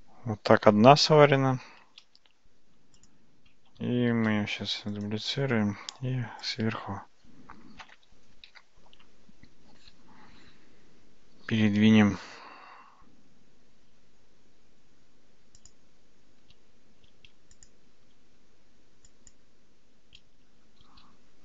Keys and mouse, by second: 4.1 shift+d, 5.8 `, 8.8 g, 17.7 click, 19.1 shift+click, 20.8 g.